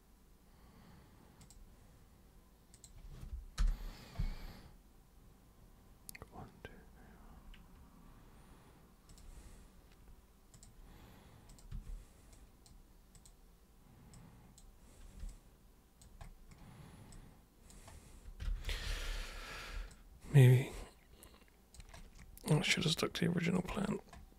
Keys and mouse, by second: 1.4 super+click, 2.8 super+click, 3.6 super+Return, 9.1 ctrl+super+click, 10.6 super+click, 11.5 super+click, 11.7 super+w, 12.4 super+click, 13.2 super+click, 14.2 super+click, 15.3 alt+super+click, 17.1 alt+super+click, 18.7 ctrl+super+z, 18.9 ctrl+super+z, 19.1 ctrl+super+z, 19.9-21.8 alt+super+drag, 22.6-23.6 alt+super+drag.